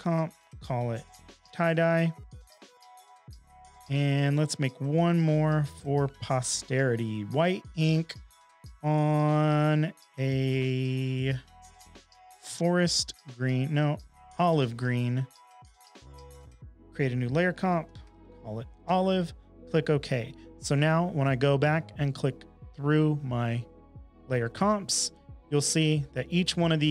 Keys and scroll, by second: 0.0-1.8 typing, 17.3-18.7 typing, 18.8 Return.